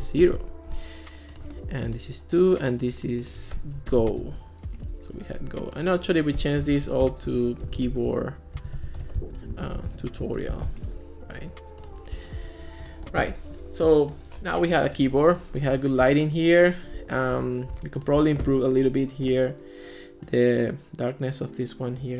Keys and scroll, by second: 0.0 0, 0.2 Return, 3.9 BackSpace, 4.8 Return, 7.5-11.1 typing.